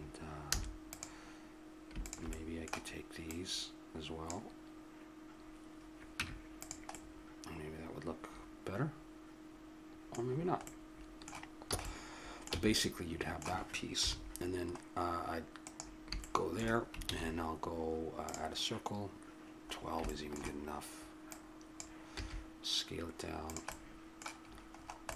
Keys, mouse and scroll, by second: 0.6 a, 0.9-2.3 right drag, 2.3-5.2 drag, 6.2 Tab, 6.9-8.3 drag, 10.2-14.1 middle drag, 11.7 a, 12.5 a, 13.9 KP_7, 16.3 middle click, 17.0 shift+a, 19.7 middle click, 21.3 click, 22.2 s, 23.7-25.1 middle drag.